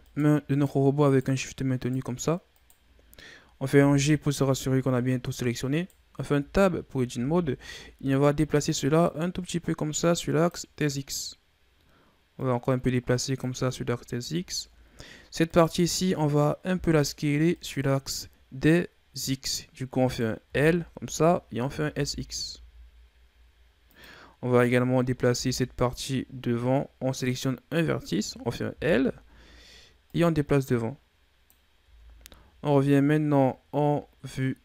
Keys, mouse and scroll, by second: 0.2 shift+right click, 0.7 shift+right click, 1.3 shift+right drag, 2.0 shift+right click, 2.8 shift+right click, 3.9 g, 6.7 Tab, 7.4 a, 8.9-11.9 drag, 12.6-14.1 drag, 14.1-15.7 scroll up 7, 15.7 right click, 17.0 l, 17.8 right click, 20.3 right click, 20.6 l, 21.8 s, 24.9 right click, 25.6 l, 27.4 right click, 28.9 l, 30.3-32.0 drag, 32.0 Tab, 32.5 a, 32.9-34.3 scroll down 4, 34.3-34.6 scroll up 4.